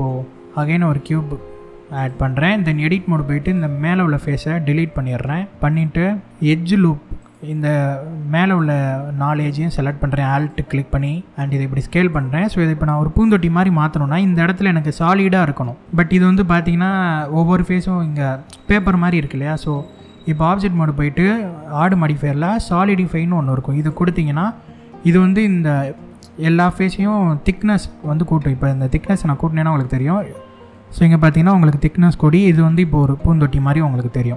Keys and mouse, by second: 2.4 Tab, 4.4 x, 6.3 alt+2, 8.1 click, 9.9 alt+click, 11.6 click, 13.0 middle click, 15.8 middle click, 18.8 middle click, 19.7 Tab, 21.3-23.6 drag, 28.3-29.6 drag, 30.4-32.4 middle drag, 33.1-34.3 drag.